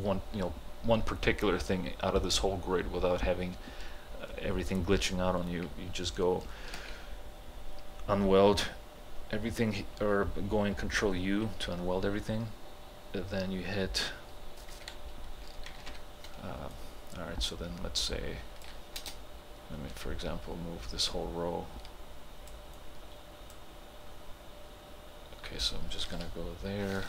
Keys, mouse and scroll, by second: 0.0 alt+click, 6.8 ctrl+u, 14.8 h, 15.8 ctrl+h, 16.8-19.0 drag, 19.0 space, 20.1-26.1 drag.